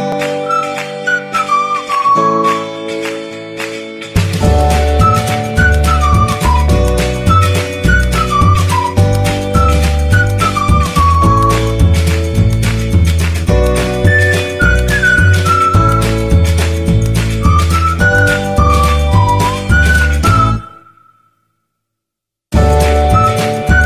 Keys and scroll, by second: 0.8 1, 1.2 Insert, 1.6 Delete, 4.7 f, 4.9 1, 5.4 e, 5.5 z, 7.7 e, 7.8 z, 9.0 e, 10.8 e, 11.4 e, 16.8 1, 17.2 e, 17.3 z, 19.6 e, 20.7-23.7 typing.